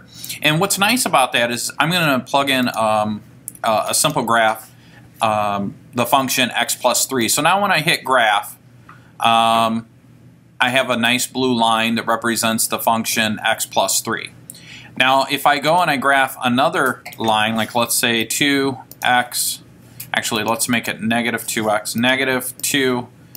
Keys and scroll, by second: 4.2 3, 17.3 Down, 18.4 2, 20.5 Left, 20.9 Left, 22.8 2.